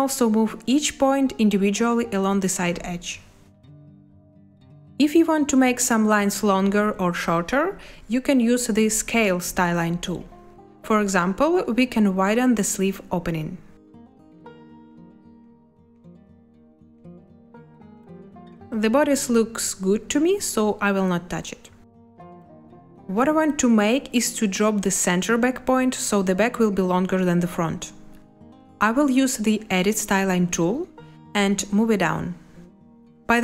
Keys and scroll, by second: 4.1 Escape, 18.6 space, 21.4 space.